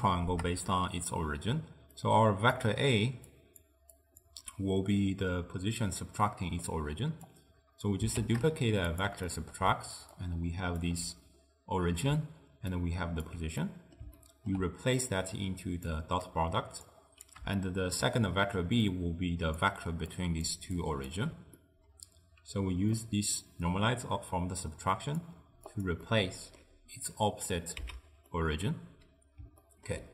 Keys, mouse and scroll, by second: 1.5-4.4 typing, 2.1-2.6 drag, 3.4 click, 4.0 click, 6.3-7.4 middle drag, 7.4 click, 8.2 shift+d, 9.4 middle click, 10.2-13.7 alt+right drag, 13.7-15.1 middle drag, 15.1 drag, 16.3 click, 17.7-18.2 shift+middle drag, 18.2-21.2 typing, 19.0 click, 20.2 click, 20.8 click, 21.7-23.0 middle drag, 23.0 click, 25.8 click, 26.1-27.9 middle drag, 27.9 x, 28.4-30.1 middle drag.